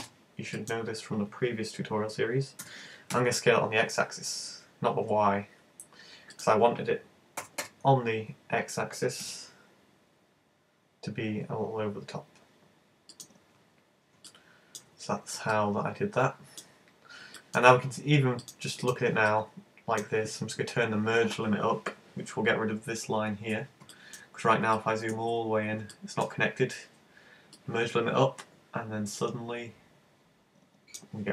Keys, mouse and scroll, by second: 0.0 super+space, 2.6 s, 6.4 click, 7.4 g, 13.3 click, 13.7-14.1 scroll down 3, 14.3 middle click, 15.1-15.4 scroll down 5, 15.5 middle click, 16.7-17.1 scroll up 3, 17.4 shift+middle click, 18.4 click, 19.2 middle click, 21.9-22.5 scroll up 6, 23.9 shift+middle click, 24.2-24.8 scroll up 3, 24.8 shift+middle click, 25.3-25.8 scroll up 3, 26.0 shift+middle click, 27.6 click.